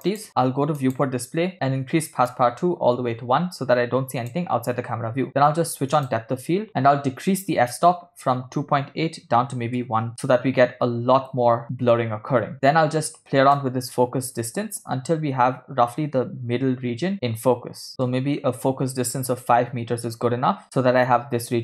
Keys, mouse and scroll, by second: 1.4 click, 1.5-2.3 scroll down 1, 2.3 scroll down 1, 2.7-5.3 drag, 6.7-10.1 drag, 14.0-17.9 drag, 19.1-20.6 ctrl+middle drag.